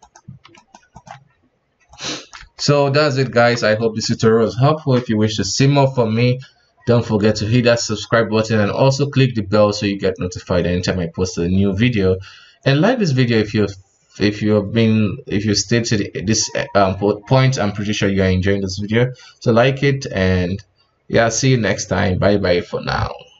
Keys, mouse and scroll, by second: 0.9 right click, 1.1 r, 2.2 r, 3.2 KP_1.